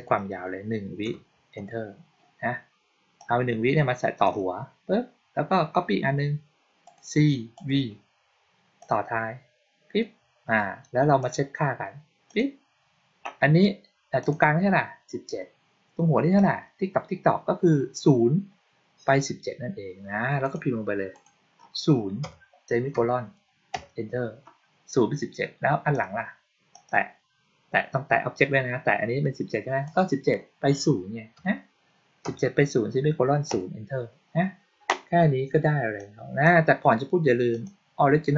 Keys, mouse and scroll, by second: 3.0-4.1 drag, 6.7 click, 7.4 click, 8.6-9.8 drag, 11.1 click, 12.1 click, 14.1 click, 16.2 click, 20.3 click, 21.0 click, 25.8 click, 26.6 click, 29.7 click, 35.8-36.3 drag, 37.4 click.